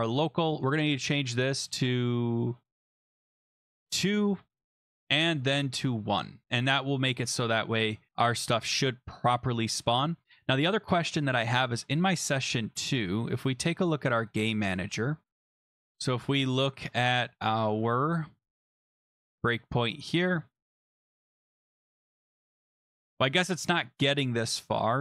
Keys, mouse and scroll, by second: 0.5-1.1 scroll down 5, 1.1 click, 1.2 click, 2.6 scroll, 3.0 click, 3.0 click, 3.3 click, 3.4 click, 3.6 2, 4.0 click, 4.5 BackSpace, 4.7 Return, 5.4 click, 5.5 click, 6.0 1, 6.4 click, 7.1 ctrl+s, 9.7 click, 10.2 scroll down 4, 11.3 click, 12.6 scroll, 14.2 click, 15.5 scroll, 18.4 scroll, 20.8 click, 21.3 click, 21.9 click, 22.4 click, 22.5 click, 24.3-24.7 scroll down 5.